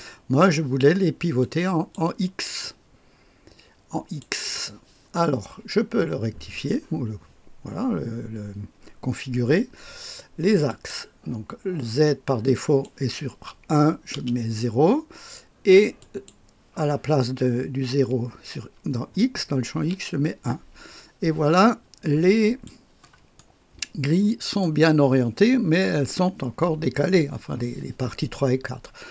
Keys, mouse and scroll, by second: 1.4 click, 2.6-4.2 drag, 10.6 click, 12.5 click, 14.1 KP_0, 16.0 click, 19.7 KP_1, 22.4-23.6 drag, 23.6 right click, 23.9 click, 24.8-26.4 right drag, 28.5-29.1 scroll down 1.